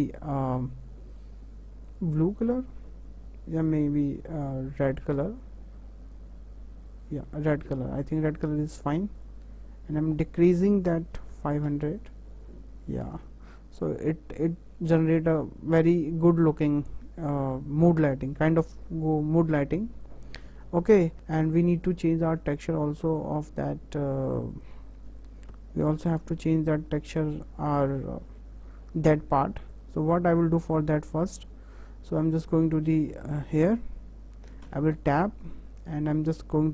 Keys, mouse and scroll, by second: 9.2 drag, 10.3-11.5 drag, 11.5 KP_0, 12.9 click, 13.2 KP_0, 19.8 KP_0, 20.8 scroll up 4, 21.1-23.5 middle drag, 24.2 scroll up 1, 24.6 click, 26.0 shift+h, 27.0-27.3 scroll up 3, 27.3-29.7 middle drag, 29.7 click, 30.3-32.4 middle drag, 32.4 click, 32.9-33.3 shift+middle drag, 33.3 click, 34.6 Tab, 35.3 middle click, 35.7-36.1 scroll up 2, 36.1-36.7 shift+middle drag.